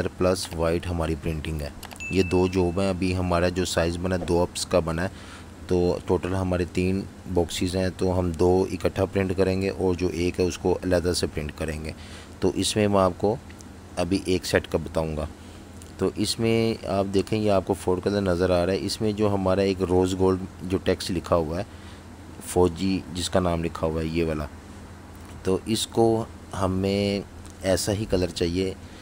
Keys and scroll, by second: 0.5-1.7 typing, 4.9 v, 6.6 v, 6.9 space, 25.0 super+z, 26.1 super+3.